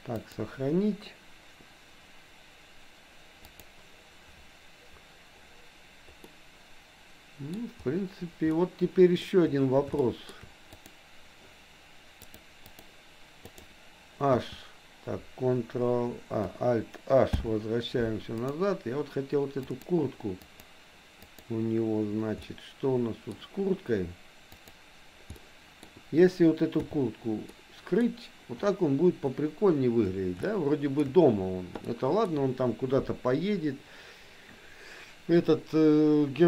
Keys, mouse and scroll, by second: 0.2-4.6 drag, 6.3-7.6 middle drag, 8.6 middle click, 10.0 shift+middle click, 10.7 click, 12.2 click, 13.5 click, 14.3 h, 17.3 alt+h, 18.5 click, 19.7 click, 20.5 click, 21.2 click, 22.5-23.5 middle drag, 24.6 click, 25.3 middle click, 26.8 h, 27.6 middle click, 30.5 shift+middle click, 32.0 middle click.